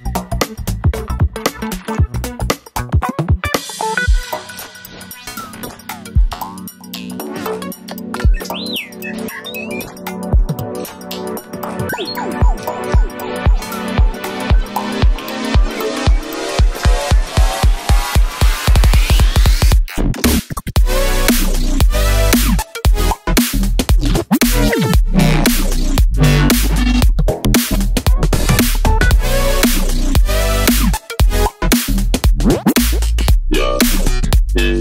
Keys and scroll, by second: 0.4 super+c, 0.5 super+v, 4.6 Page_Up, 4.7 Page_Up, 4.8 Page_Up, 4.8 Page_Up, 7.2 Down, 7.3 Page_Down, 7.4 Page_Down, 7.4 Page_Down, 7.5 Home, 7.7 Left, 7.8 Left, 8.1 Down, 8.2 Down, 17.1 Left, 17.4 Up.